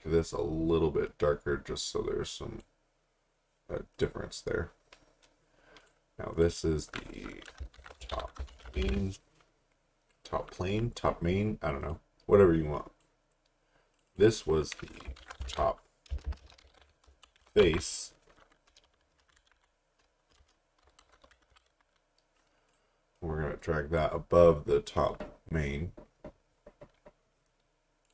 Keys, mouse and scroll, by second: 1.1 click, 7.5-9.4 typing, 11.8 click, 15.0-22.2 typing, 22.7 click, 28.0 click.